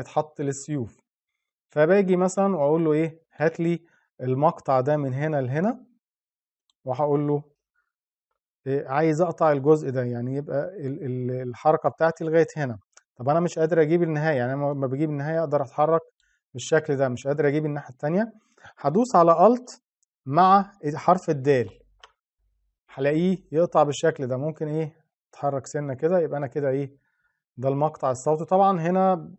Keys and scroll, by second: 21.1 alt+د.